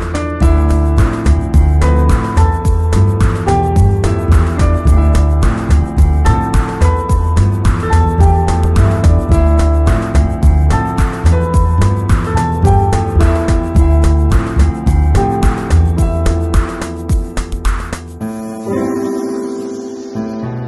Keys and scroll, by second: 6.3 w, 14.3 shift+super+i, 17.8 super+-.